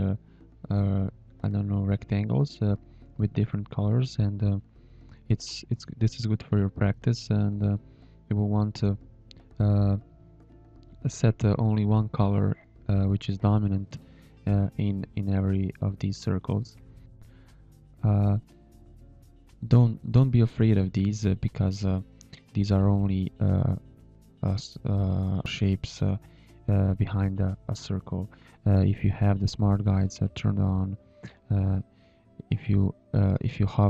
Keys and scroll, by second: 3.2 h, 6.8 a, 7.8 space, 8.5 shift+a, 10.7 shift+a, 12.8 a, 14.3 space, 15.1 space, 16.1 Delete, 17.3 Delete, 18.2 space, 19.5 z, 20.0 space, 20.5 shift+a, 22.6 shift+a, 24.7 Delete, 27.9 Delete, 29.3 b, 29.8 h, 31.3 a.